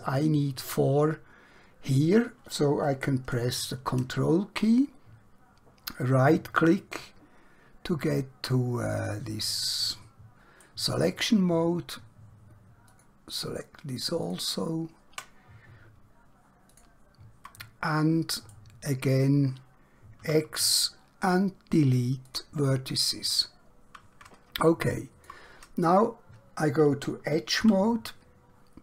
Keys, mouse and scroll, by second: 4.1 ctrl+Num_Lock, 6.1 ctrl+right click, 13.0 ctrl+click, 14.3 ctrl+click, 16.7 shift+click, 18.5 right click, 20.4 x, 22.2 click, 23.8-24.4 scroll up 1, 24.7 shift+middle click.